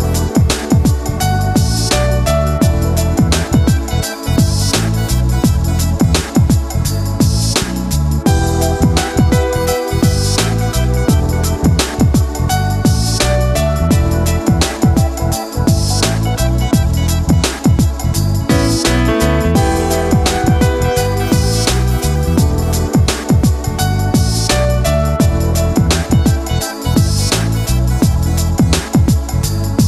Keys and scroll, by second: 3.1 ctrl+z, 4.6 ctrl+z, 8.1 ctrl+z, 18.9 ctrl+0, 21.8 ctrl+g.